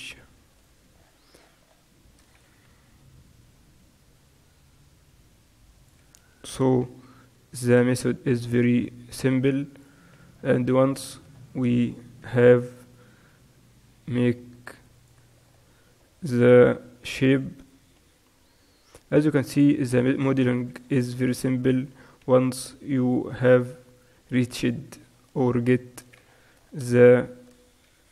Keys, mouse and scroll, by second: 3.3 e, 7.6 e, 10.8-13.3 middle drag, 13.3 e, 15.5 middle click, 17.2-20.0 middle drag, 18.2 g, 20.5 ctrl+r, 21.3-23.3 right drag, 22.4 g, 23.5-27.1 right drag, 23.7 g, 27.1 middle click, 27.2 right click, 27.3 middle click, 28.0 e.